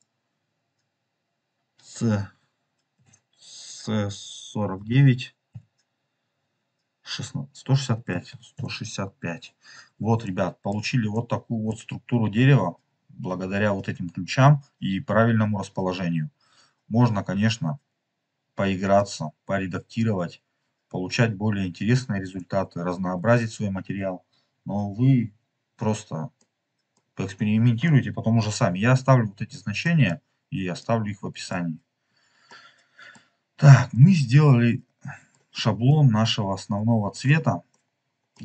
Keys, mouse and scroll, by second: 10.3 middle click, 11.1 middle click, 18.8-22.3 drag, 23.7 ctrl+z, 26.5 middle click, 27.0-27.6 scroll down 3, 27.8 middle click, 29.7 middle click, 30.7 click, 31.9 scroll down 2, 32.4 middle click, 33.6 scroll down 2, 33.8-35.4 middle drag, 35.8-37.1 drag, 37.4 scroll down 3, 37.6 middle click.